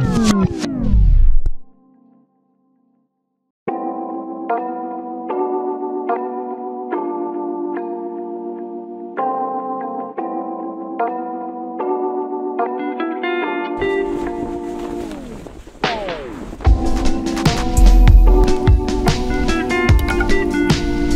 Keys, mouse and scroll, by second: 8.2-8.6 scroll down 1, 8.6-9.7 scroll up 1, 12.7-13.3 scroll down 1.